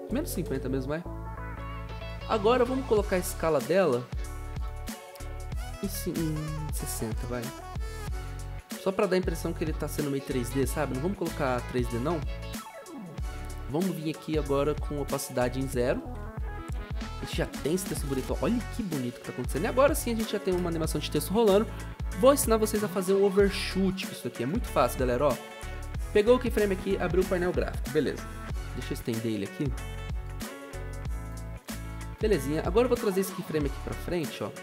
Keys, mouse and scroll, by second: 0.0-0.9 typing, 6.5-7.7 typing, 9.1-9.8 typing, 15.9 typing, 17.9 0, 20.5 0.